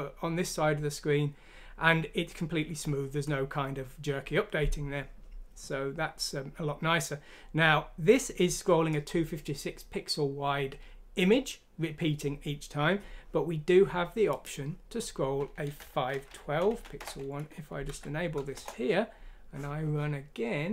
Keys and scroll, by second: 15.8 Home, 16.7 Down, 17.8 F6, 18.5 Return.